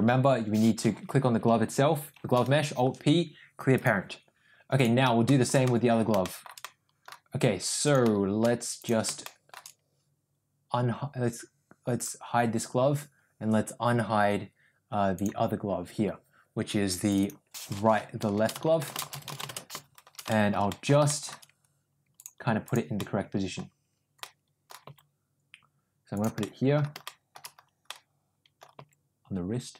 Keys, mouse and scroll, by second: 2.2 alt+p, 5.2 middle drag, 5.6-5.9 middle drag, 6.1 shift+middle drag, 6.5-7.0 middle drag, 8.7 click, 9.1-9.4 shift+middle drag, 11.9 click, 15.1 click, 17.2-20.1 drag, 20.2 shift+middle drag, 20.6 middle click, 21.0 shift+middle drag, 22.5 click, 22.9-23.5 middle drag, 24.1-24.6 middle drag, 24.8 g, 26.4 middle click, 26.9 middle click, 27.9 middle click, 28.7 g.